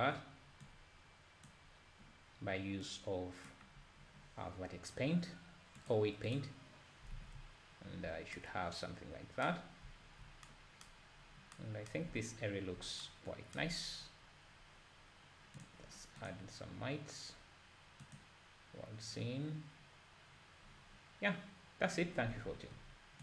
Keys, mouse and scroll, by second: 1.0-7.2 drag, 7.2 alt+a, 7.4 `, 11.1-11.6 scroll down 2, 12.5 `, 16.4-19.4 drag.